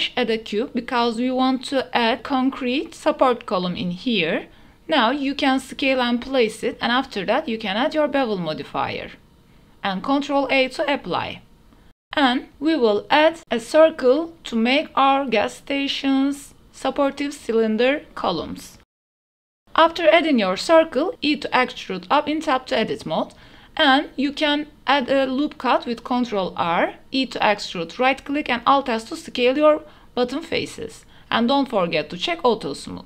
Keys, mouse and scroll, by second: 2.3-5.1 typing, 2.8 click, 3.8 shift+click, 4.2 shift+click, 6.2 Tab, 6.5 click, 7.7 click, 8.1-8.8 drag, 9.3 middle click, 12.0 ctrl+a, 12.1 click, 12.5 Tab, 12.5 3, 12.5 shift+s, 12.8 shift+a, 15.0 click, 15.4 s, 17.0 g, 17.3 z, 19.7 shift+Tab, 19.7 shift+click, 20.0 1, 20.8 shift+click, 21.4 e, 21.8 z, 23.2 click, 23.5 Tab, 24.4 shift+middle drag, 24.7 g, 25.1 ctrl+r, 26.4 click, 27.1 3, 28.3 e, 29.2 alt+s, 31.1 shift+click, 31.4 Tab.